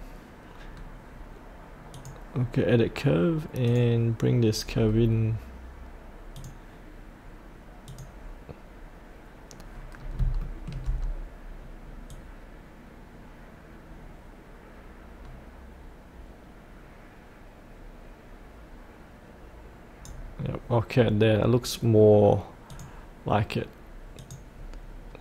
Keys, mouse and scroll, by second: 0.7-1.9 scroll down 1, 1.9-4.7 drag, 4.9-6.4 scroll up 1, 6.4 click, 10.0 scroll up 1, 10.4 shift+middle click, 11.0-12.1 scroll down 1, 12.1-20.9 drag, 20.9-22.7 scroll up 1, 22.7 click.